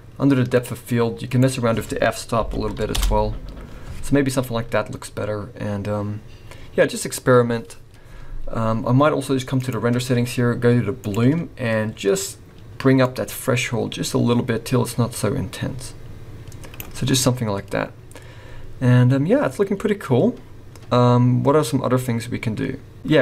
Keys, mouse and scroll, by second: 0.5 click, 1.3 click, 4.3 scroll up 1, 9.7 click, 11.0 click, 13.0 click, 19.5 scroll down 2.